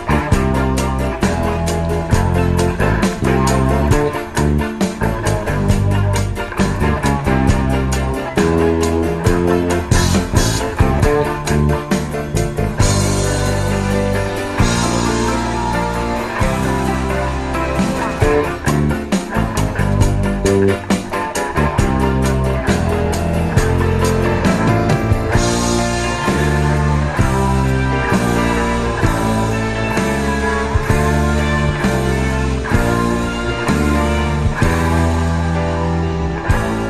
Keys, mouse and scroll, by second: 8.4-9.8 drag, 12.7 n, 14.0-15.4 drag, 19.0 x, 19.0 shift+a, 28.6-30.1 drag.